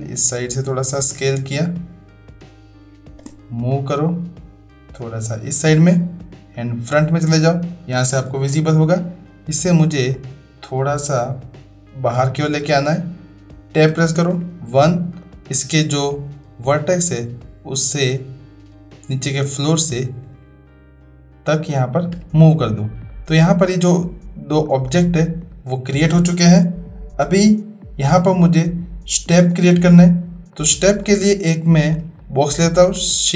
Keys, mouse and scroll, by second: 2.9 space, 4.1-5.7 drag, 6.5 click, 9.7-12.1 drag, 13.9 Tab, 14.3 1, 15.2-16.0 drag, 17.0-20.3 drag, 22.2 Tab, 23.1-23.7 middle drag, 25.5-25.9 middle drag, 30.5 middle click, 31.0-31.7 middle drag, 32.1-32.7 shift+drag, 32.9 click.